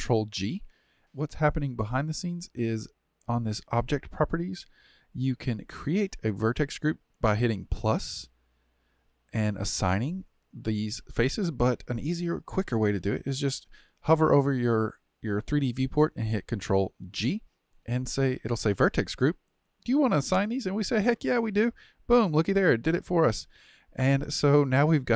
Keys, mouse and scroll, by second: 3.8 click, 17.1 ctrl+g.